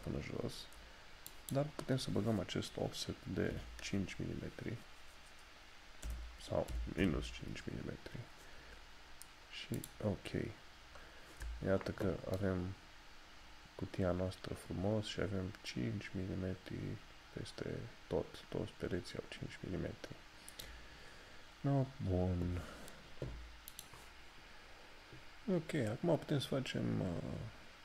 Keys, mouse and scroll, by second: 9.8 click, 10.7 scroll down 1, 13.0 shift+middle click, 13.1 shift+scroll down 1, 19.7 scroll down 1, 23.9 click.